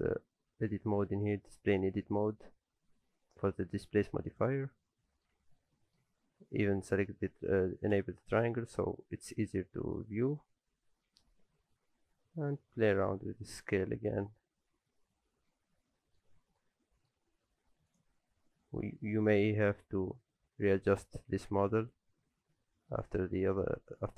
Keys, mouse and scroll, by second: 4.3 click, 5.1 middle click, 5.4 Tab, 5.5-6.1 scroll down 2, 5.7 middle click, 6.1 Tab, 8.0 click, 8.5 middle click, 9.0-10.0 scroll up 1, 10.0 middle click, 10.3-10.9 scroll up 1, 10.9-11.4 scroll up 1, 10.9 a, 11.4 s, 14.7 alt+a, 14.9 Tab, 15.1-16.3 scroll down 4, 15.5 middle click, 16.3-17.3 scroll up 2, 16.6 middle click, 17.3-17.9 scroll up 2, 17.9 click, 18.2 scroll up 2, 19.0 middle click, 19.0 scroll up 1, 19.7 s, 21.5 Tab, 21.8 a, 22.2 s.